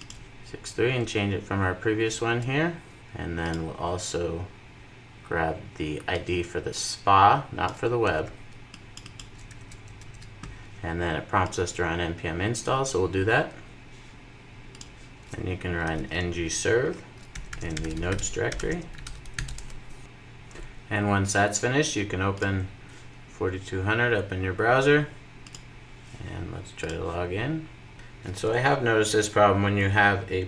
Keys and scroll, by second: 3.0 super+v, 9.4 super+v, 10.0 super+s.